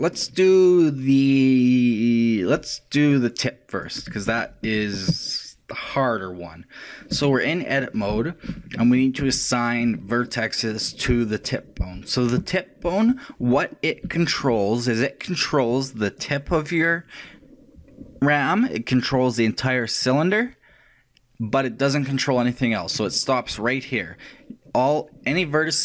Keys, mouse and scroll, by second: 3.8-6.8 right drag, 7.3-11.7 shift+middle drag, 8.1 shift+a, 13.3-14.6 middle drag, 14.8-17.2 shift+middle drag.